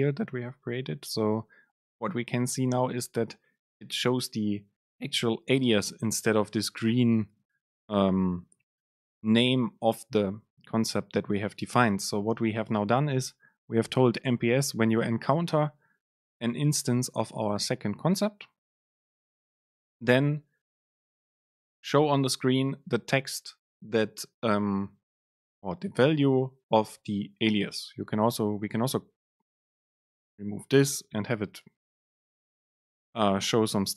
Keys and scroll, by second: 31.1 BackSpace, 32.1 shift+Left, 32.8 BackSpace.